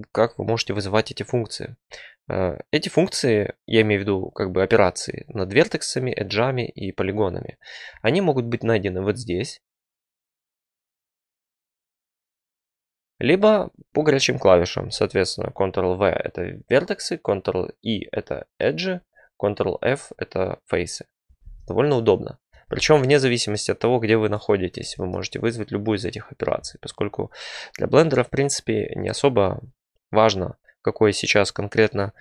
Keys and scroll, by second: 21.3 ctrl+f, 22.6 ctrl+v.